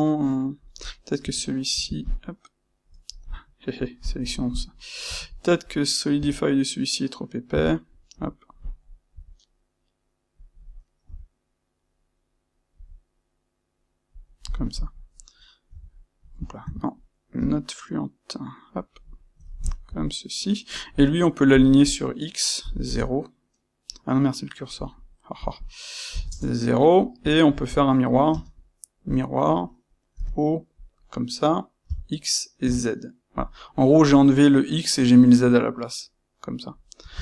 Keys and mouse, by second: 0.8 click, 1.2 space, 1.7 Escape, 2.0 click, 3.7 click, 5.0 space, 14.7 click, 15.6 f, 16.6 Escape, 17.3 c, 18.8 click, 19.0-21.4 middle drag, 21.4-24.8 drag, 22.9 KP_Enter, 25.3-26.9 drag, 26.3 KP_Enter, 26.9-30.7 shift+middle drag, 28.2 space, 30.7 click, 34.1-37.2 middle drag.